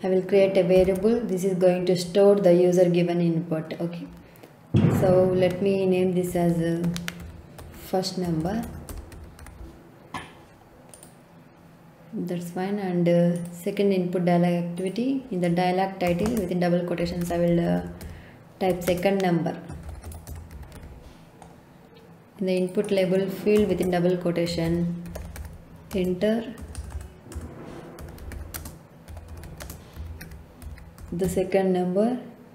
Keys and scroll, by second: 0.7 ctrl+k, 6.0-9.9 typing, 16.2-21.2 typing, 23.6-26.5 typing, 27.7-31.7 typing.